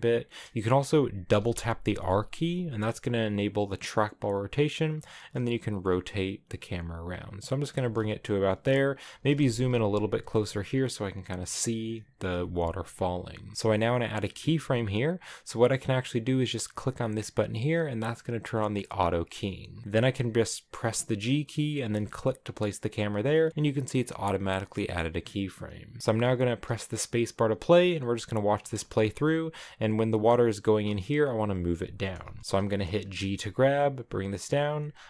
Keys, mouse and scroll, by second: 0.6-1.2 scroll up 3, 1.3 r, 5.2 g, 7.1 g, 7.7 r, 8.6 g, 9.1 g, 10.2 g, 12.4 g, 20.8 g, 26.0 space, 28.6 space, 28.8-33.1 shift+middle drag, 33.1 g.